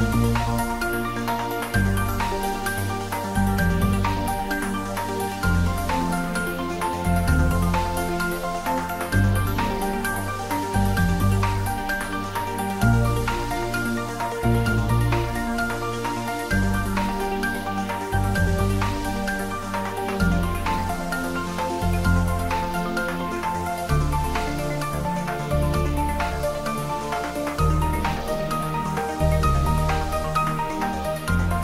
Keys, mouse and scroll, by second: 0.5 click, 1.9 click, 3.5 shift+d, 3.7 r, 5.0 click, 5.3 g, 6.6 click, 6.8 scroll down 1, 7.1 middle click, 7.7 scroll up 1, 8.3-10.2 middle drag, 11.2 click, 13.4 Return, 14.7-15.1 scroll down 1, 15.1 click, 16.8 5, 17.1 Return, 18.1-18.7 scroll down 1, 18.7 click, 19.3 g, 19.6 z, 20.5 click, 21.5-22.0 scroll up 1, 23.2 click, 24.7 5, 24.9 Return, 27.0 click, 28.4 3, 28.6 Return, 29.5 scroll down 1, 30.3 click.